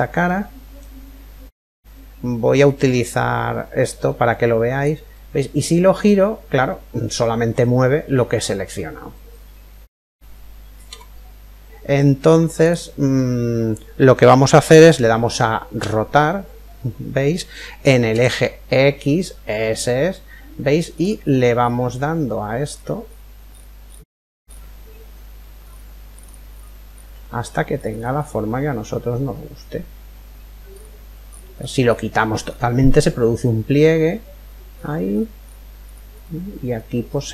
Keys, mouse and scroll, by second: 2.6 click, 4.5 click, 12.2 ctrl+click, 15.3 r.